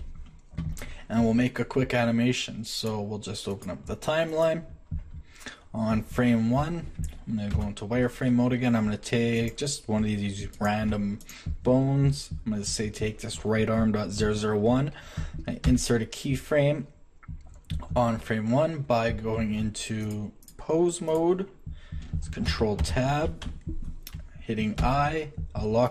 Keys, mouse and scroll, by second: 7.5 shift+z, 10.9 Tab, 15.6 i, 22.5 ctrl+Tab, 22.8 ctrl+Tab, 24.8 i.